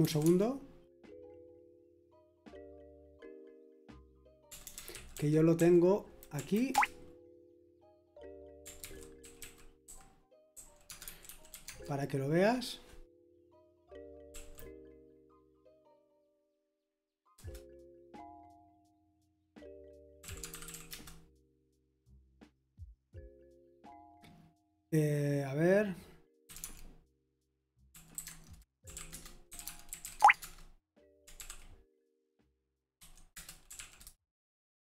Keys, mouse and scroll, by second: 0.0-0.5 typing, 4.5-6.0 typing, 6.3 Right, 6.7 Return, 8.8 ctrl+c, 9.2-12.0 typing, 14.3 Right, 14.3 typing, 15.6 Return, 17.3 Return, 20.0-21.2 typing, 26.3-31.9 typing, 32.9-34.1 typing, 33.3 Return.